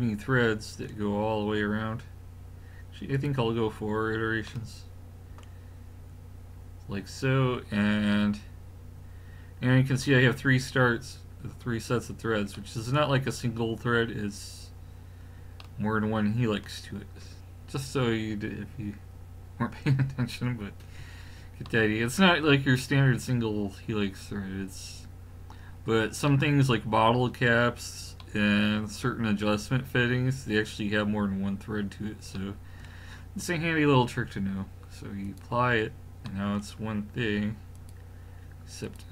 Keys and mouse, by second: 3.1-4.6 drag, 4.6-5.0 middle drag, 8.1-15.7 middle drag, 35.3-36.3 drag, 36.3-37.2 middle drag, 37.7 click.